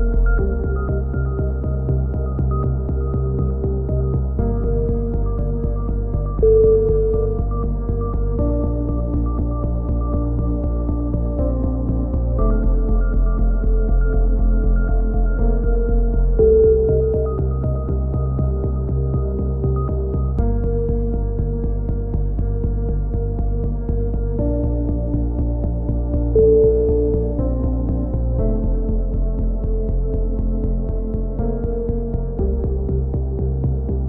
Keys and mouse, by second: 1.7 z, 4.7-5.3 drag, 8.5 KP_1, 9.0 KP_3, 9.2-10.0 drag, 10.3-10.9 drag, 10.8 b, 12.0 x, 16.7 c, 18.9 ctrl+z, 18.9 right click, 19.1 ctrl+z, 19.4 a, 19.6-20.2 drag, 20.4-20.9 drag, 21.9 shift+d, 22.2 click, 23.6 Tab, 24.1 Tab, 25.0-27.3 right drag, 25.0 x, 27.3 ctrl+l, 27.6 h, 28.0 KP_3, 28.5 click, 32.3-34.0 middle drag.